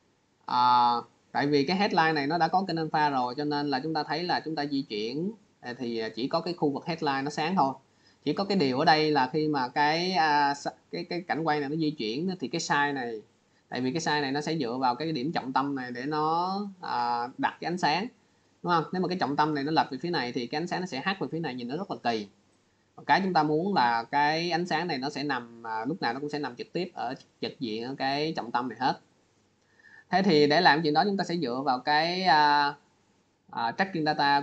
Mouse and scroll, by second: 2.2 click, 3.3 click, 4.9 click, 6.1 click, 8.4 click, 9.6 click, 19.9 click, 22.4 click, 24.8 click, 32.6 click.